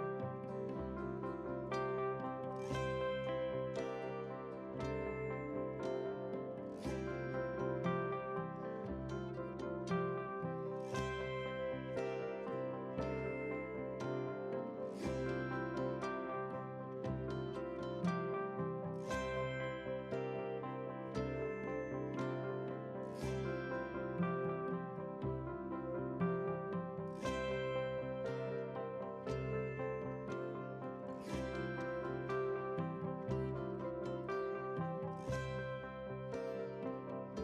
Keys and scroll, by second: 2.0 ctrl+a, 14.5 ctrl+r.